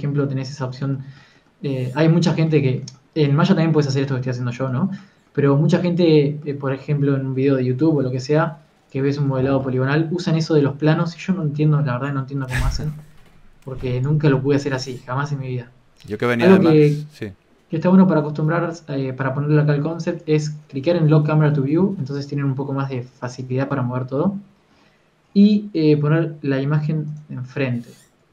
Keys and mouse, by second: 8.6 n, 9.2 click, 9.5 n, 9.7-11.3 drag, 12.9 n, 14.5 click, 14.7 n, 15.5-16.8 drag, 16.0 n.